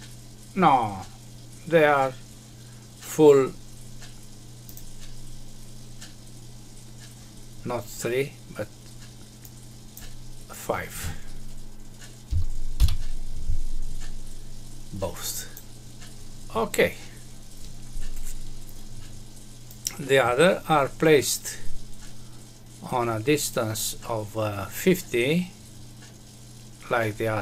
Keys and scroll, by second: 12.2 Delete.